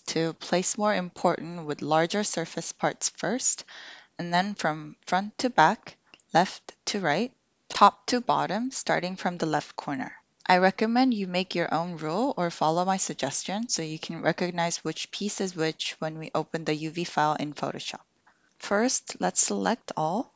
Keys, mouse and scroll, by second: 18.4-19.6 drag.